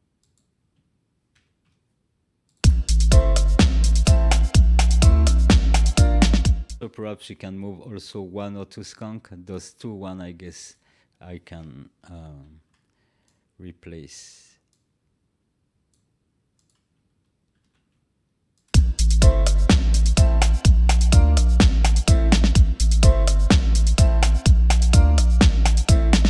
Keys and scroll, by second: 1.3 ctrl+v, 2.5 space, 12.4 ctrl+x, 17.6 ctrl+v, 18.6 space.